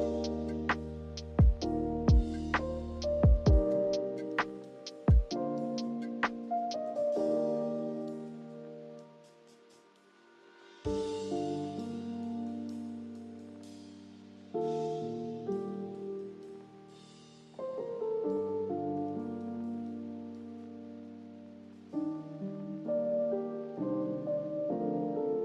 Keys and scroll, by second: 13.9-14.7 typing, 16.8-17.6 typing, 20.2 typing, 22.5-24.7 typing.